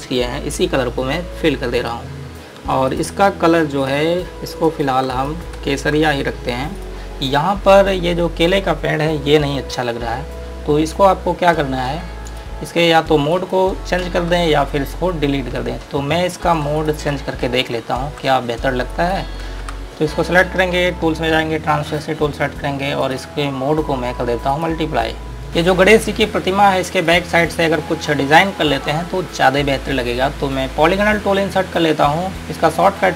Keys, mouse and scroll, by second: 2.0 click, 2.3-2.9 scroll up 1, 3.1 click, 4.8 click, 5.4 click, 6.8-7.1 scroll down 1, 7.1 scroll up 1, 9.1 scroll down 1, 10.7-11.4 scroll up 1, 11.7 scroll down 1, 12.6 click, 13.7 click, 16.0 scroll up 1, 17.0 ctrl+click, 17.9 ctrl+alt+click, 18.6 scroll down 1, 19.2 click, 20.0 z, 22.2 click, 25.5 scroll down 1, 26.3 scroll up 1, 27.1 click, 32.3 click.